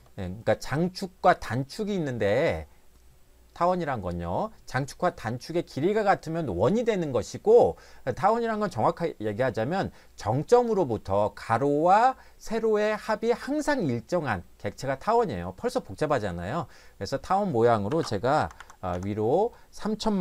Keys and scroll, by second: 17.9 3, 18.4 0, 18.6 0, 18.9 0.